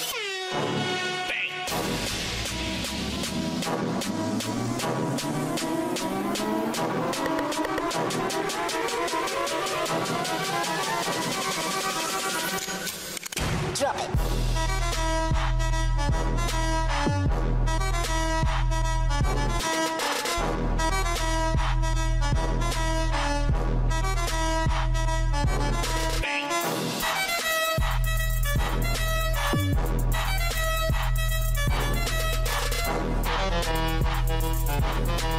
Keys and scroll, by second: 30.2 ctrl+t.